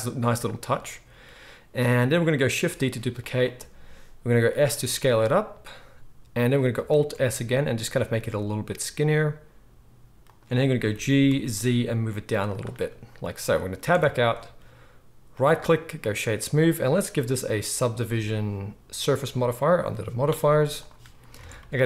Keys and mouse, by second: 2.8 shift+d, 4.3 s, 6.8 alt+s, 8.4-15.3 shift+middle drag, 10.8 g, 13.9 Tab, 15.3-16.9 drag, 16.9-19.2 middle drag, 19.2 click, 19.7-21.8 middle drag, 21.3 alt+a.